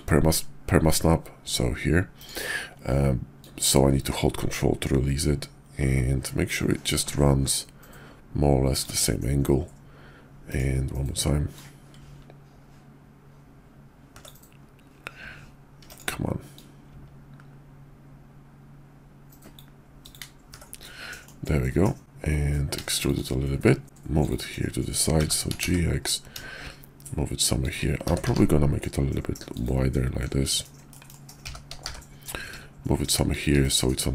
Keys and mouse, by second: 3.3-8.8 drag, 11.5-14.3 drag, 16.5-19.6 drag, 19.0 typing, 20.8-23.1 drag, 21.5-23.8 typing, 23.2 shift+click, 24.2 click, 25.1 g, 28.0 s, 30.8 middle click, 31.4 g, 33.6-34.1 middle drag.